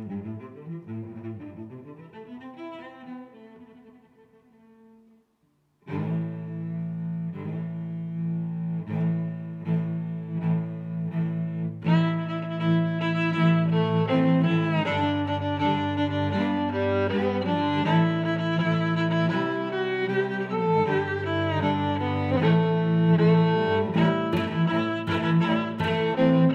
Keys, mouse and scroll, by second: 0.6 middle click, 2.2 click, 2.5 click, 2.8 click, 3.6 middle click, 4.3 e, 4.4 y, 6.6 click, 7.3 Tab, 10.0 click, 10.5 shift+super+Tab, 12.2 s, 13.0 click, 13.5 g, 13.6 y, 14.1 click, 14.7 s, 15.6 click, 15.9 s, 16.0 z, 16.7 click, 17.8 click, 18.6 s, 19.3 click, 19.6 s, 19.7 z, 20.2 click, 20.6 s, 21.4 click, 21.6 Tab, 22.1 Tab, 22.6 s, 23.5 click, 23.9 s, 24.4 click, 24.8 s, 25.2 click.